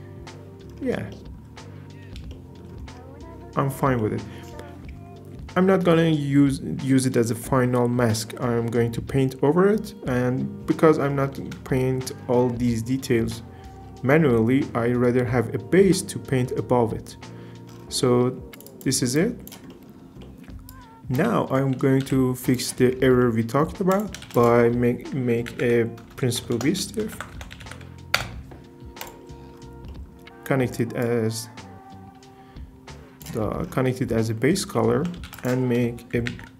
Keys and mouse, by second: 2.3 shift+middle drag, 4.0 middle click, 18.7 click, 19.2 click, 20.2 middle click, 20.7 drag, 22.0 g, 23.9 click, 24.2 shift+a, 26.2 BackSpace, 26.4 BackSpace, 29.2 click, 31.0-33.2 drag, 34.7 shift+click, 35.3 shift+a.